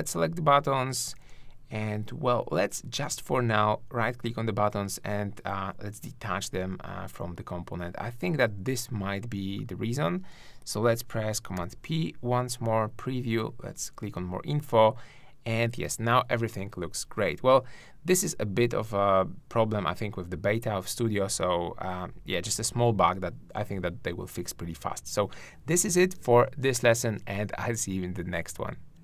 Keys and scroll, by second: 11.6 super+p.